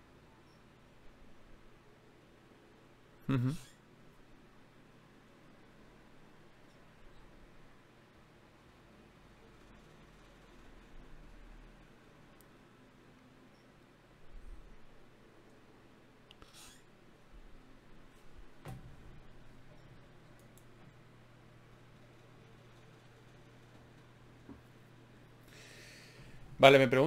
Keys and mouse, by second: 6.4 KP_Divide, 11.4-13.2 right drag, 15.3-16.9 right drag, 16.9 f, 18.5 click, 18.9 ctrl+r, 23.1-24.1 middle drag, 23.5 g, 24.9 middle click, 25.3 shift+Tab, 26.1 g.